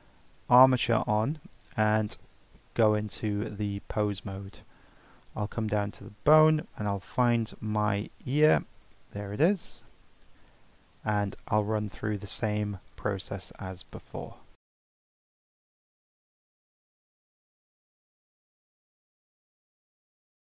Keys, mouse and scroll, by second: 0.5-1.6 drag, 4.2 ctrl+Tab, 4.9 click, 5.7-6.5 scroll down 4, 6.5-9.6 drag, 11.2-12.8 scroll down 6, 12.8 click, 13.8 click, 14.7 Tab, 14.9 shift+s, 14.9 Tab, 15.1 click, 15.3 right click, 15.5 Tab, 15.7 Tab, 15.9 scroll down 7, 16.1 click, 16.3 ctrl+Tab, 16.6 click, 16.9 scroll down 1, 17.0 scroll up 2, 17.1 click, 17.2 Tab, 17.3 scroll down 2, 17.4 shift+middle click, 17.5 scroll up 2, 17.5 shift+middle click, 17.8 click, 17.8 scroll down 1, 17.9-18.4 scroll up 3, 18.0 click, 18.1 click, 18.4 Tab, 18.5 scroll down 1, 18.5 click, 18.6 shift+middle click, 18.7 click, 18.7 scroll up 1, 18.7 Tab, 18.8 click, 18.9 shift+s, 19.0 Tab, 19.1 scroll down 1, 19.1 right click, 19.2 scroll up 1, 19.3 shift+middle click, 19.4 scroll down 5, 19.5 click, 19.9 click, 20.2 click.